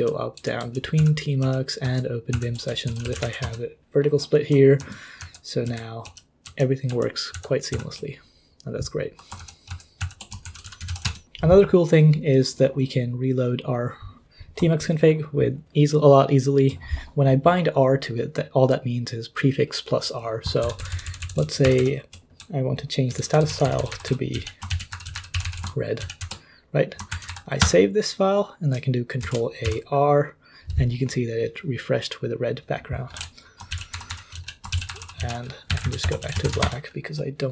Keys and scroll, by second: 0.4 ctrl+j, 1.0 ctrl+h, 1.4 ctrl+k, 1.8 ctrl+l, 2.3 ctrl+h, 2.6-3.7 typing, 4.8 ctrl+l, 5.4-6.2 typing, 6.4 ctrl+j, 6.9 ctrl+j, 7.3 ctrl+h, 7.7 ctrl+h, 9.4 ctrl+l, 9.7 ctrl+l, 10.0 ctrl+h, 10.2-11.7 typing, 20.6 ctrl+d, 20.8 ctrl+d, 20.9 ctrl+d, 21.0 ctrl+d, 21.2 ctrl+d, 21.4 ctrl+d, 21.6 ctrl+u, 21.8 ctrl+u, 22.4-27.8 typing, 26.2 ctrl+s, 29.2 ctrl+a, 29.6 r, 33.1-37.0 typing.